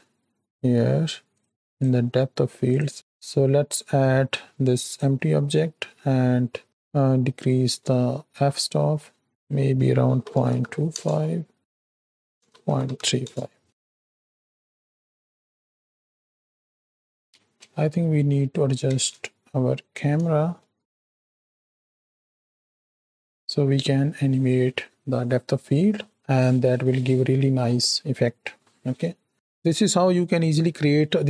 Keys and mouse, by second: 1.3 click, 1.7 drag, 6.6-9.3 drag, 9.4-11.0 drag, 11.6-13.2 drag, 13.6 ctrl+space, 15.0 click, 16.1 Home, 18.9 ctrl+space, 18.9 KP_0, 22.0-23.1 ctrl+middle drag.